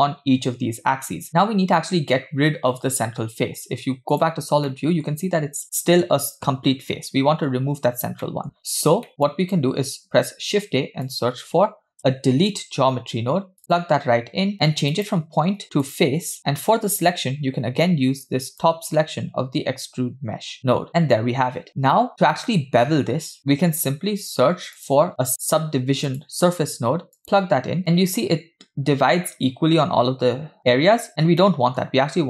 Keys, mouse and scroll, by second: 1.3-2.2 scroll down 1, 2.2-3.5 scroll down 1, 3.5-3.9 scroll down 1, 4.2 click, 4.7-5.0 middle drag, 8.2 scroll down 1, 8.2 middle click, 8.6 click, 9.1 middle click, 9.3 click, 10.1 shift+a, 14.9-16.0 drag, 18.6 click, 19.9 click, 23.4 middle click, 23.9 shift+a, 31.1 scroll up 3, 31.4 middle click, 32.0-32.2 scroll up 1.